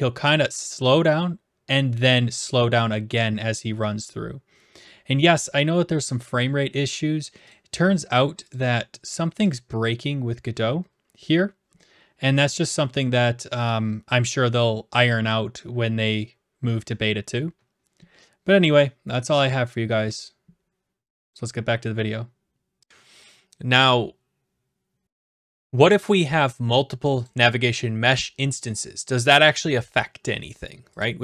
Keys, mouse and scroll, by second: 25.9 right click, 28.2 click, 31.0 click.